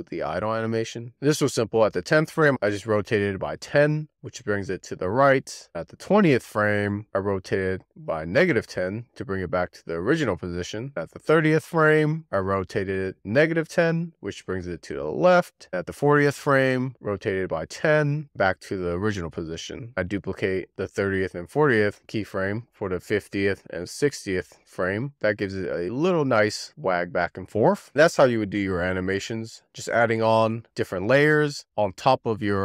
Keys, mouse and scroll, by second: 0.6-2.4 drag, 5.7-7.4 drag, 11.6-13.3 drag, 15.5 click, 16.2-17.6 drag, 19.8-22.0 drag, 22.0 shift+d, 24.9 w, 25.1-28.3 drag, 30.1-32.6 middle drag.